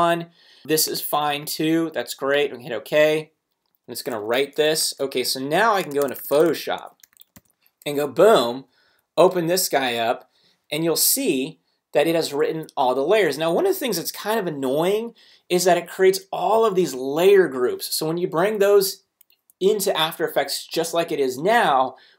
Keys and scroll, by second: 4.8 super+Tab, 7.3 super+o, 8.5 super+Right, 8.9 Down, 9.8 Return.